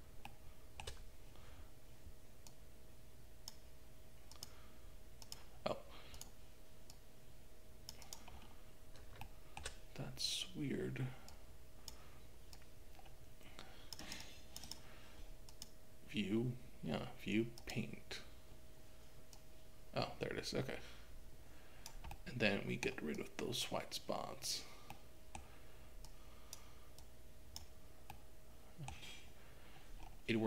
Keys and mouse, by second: 0.4 shift+middle click, 2.6 click, 4.4-5.4 drag, 6.2 click, 6.9-8.1 drag, 9.2 shift+middle click, 11.3 click, 12.6-14.1 drag, 14.2 click, 14.7 click, 15.5-17.7 drag, 19.4-22.0 drag, 22.4 middle click, 23.2 click, 25.1 middle click, 26.1 click, 27.1 click, 28.1 middle click.